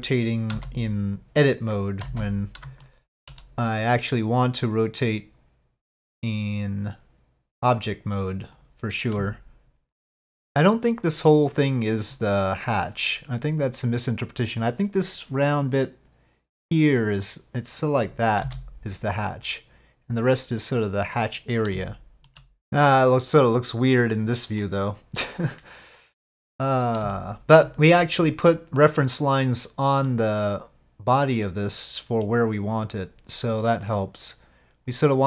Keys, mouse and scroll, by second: 0.5 z, 2.8-3.1 shift+middle drag, 3.8-7.6 drag, 8.6 click, 9.3 shift+s, 18.4 s, 21.8 shift+middle click, 24.6-26.3 middle drag, 27.1 shift+middle click, 30.1-32.2 middle drag, 33.6-35.0 drag.